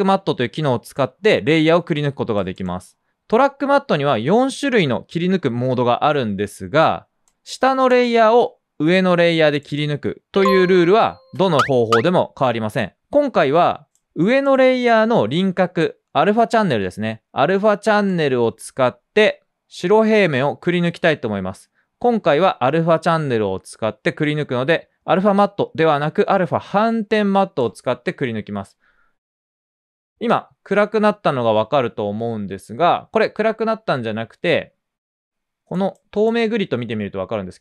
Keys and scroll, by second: 2.3 typing, 6.6 typing, 10.0 typing, 14.1 F4, 18.8 typing.